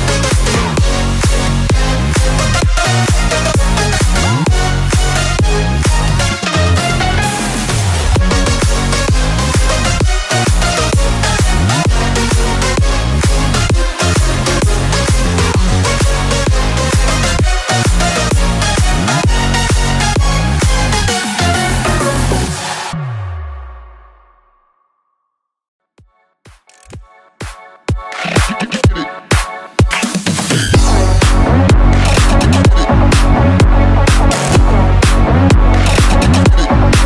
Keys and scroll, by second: 10.5 KP_2, 10.5 KP_0, 11.2 Return, 13.8 ctrl+z.